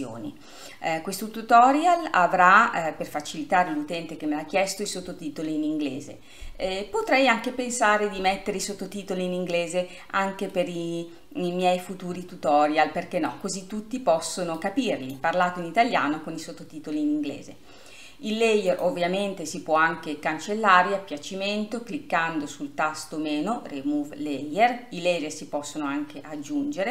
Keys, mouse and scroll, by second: 10.7-13.9 middle drag, 14.8-26.9 drag.